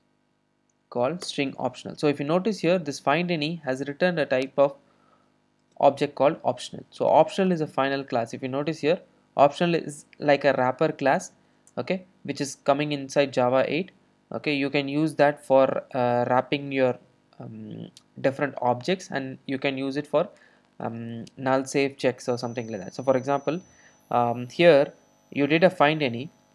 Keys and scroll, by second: 1.3 Return, 1.4 Return, 5.9 super+b, 11.6 super+e, 15.1 super+c, 23.0 super+v.